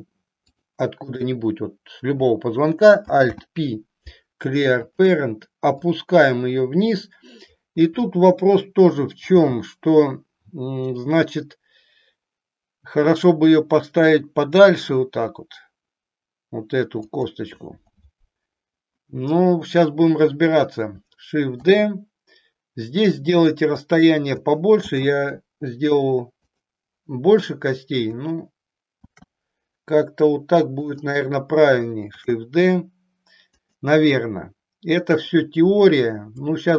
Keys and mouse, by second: 0.9 click, 3.2 alt+p, 5.8-7.6 drag, 9.3 g, 17.2 click, 21.6 shift+d, 23.9 click, 24.8 shift+d, 28.9 shift+d, 30.9 click, 32.1 shift+d, 33.7 click, 35.1 click.